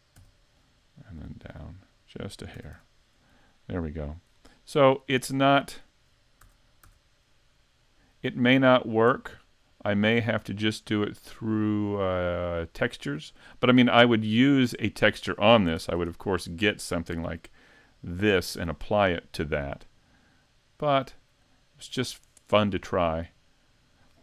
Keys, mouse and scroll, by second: 0.2 e, 2.3 click, 2.6 a, 2.7 Tab, 3.0-3.4 scroll down 5, 3.4 middle click, 4.3 scroll down 3, 4.8 middle click, 6.5 a, 6.9 a, 7.3 middle click, 8.5-9.2 scroll up 7, 9.2 middle click, 14.8 middle click, 20.0 middle click, 22.0 right click, 22.9 middle click.